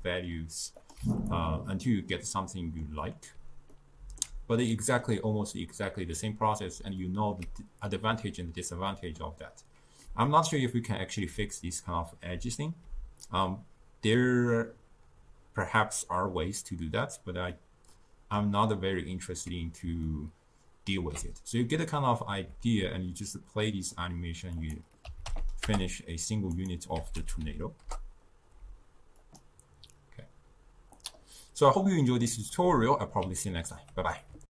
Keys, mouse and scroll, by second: 0.8 click, 2.4-3.6 middle drag, 3.8-6.9 ctrl+middle drag, 7.1-12.4 ctrl+middle drag, 12.4 d, 12.9 d, 17.6-23.2 middle drag, 23.7-24.6 middle drag, 24.6 click, 25.5 0, 26.0-26.6 scroll down 2, 26.6 scroll down 1, 26.6 click, 27.3 0, 27.5 0, 29.3 click, 31.9-34.5 middle drag.